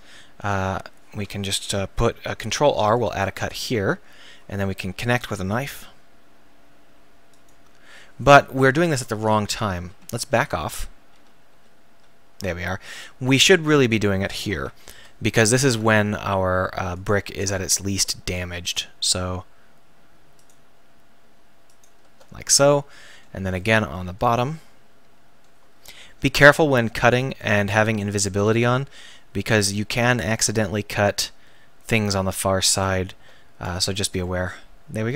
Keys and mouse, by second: 2.3 ctrl+r, 3.5 click, 4.0 click, 4.2 click, 4.6 click, 5.7 k, 8.3 click, 8.9-9.4 ctrl+z, 9.8 ctrl+z, 10.1 ctrl+z, 10.4 ctrl+z, 10.7 ctrl+z, 11.2 ctrl+z, 11.5 ctrl+z, 11.9 ctrl+z, 14.9 k, 23.2 z, 26.4 k, 33.8 z, 34.4 click, 34.8 middle click.